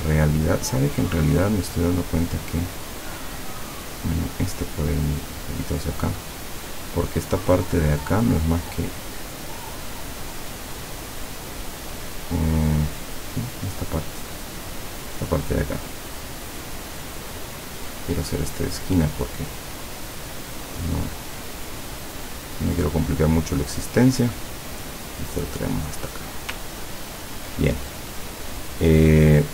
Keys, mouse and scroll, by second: 1.4 click, 2.6 click, 3.5 click, 4.4-6.3 drag, 13.4 click, 14.6 click, 18.0 click, 19.9-23.1 drag, 23.8 click, 24.5 click, 26.8-28.0 ctrl+scroll down 2, 28.0 scroll down 1, 28.1 click.